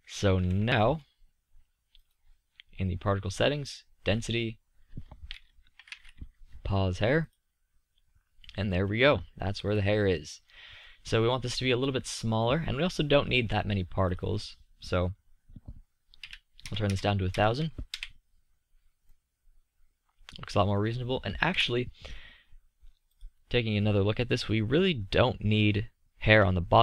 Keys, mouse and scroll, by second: 0.7 z, 5.6-8.5 middle drag, 16.9 KP_0, 21.5 KP_3.